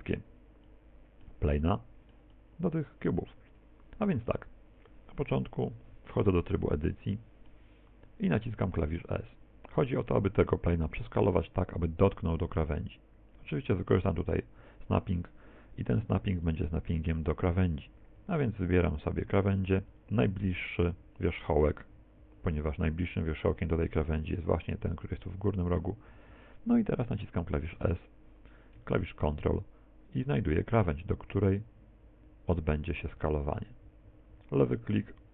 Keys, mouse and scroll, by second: 5.4 n, 6.6 middle click, 8.4 s, 16.5 click, 20.0 click, 27.8 s.